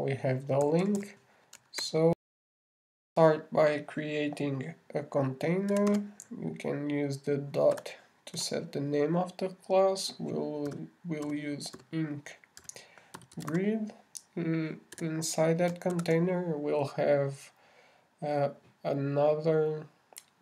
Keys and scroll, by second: 3.0 super+Return, 3.6 shift+super+i, 16.9-17.8 typing.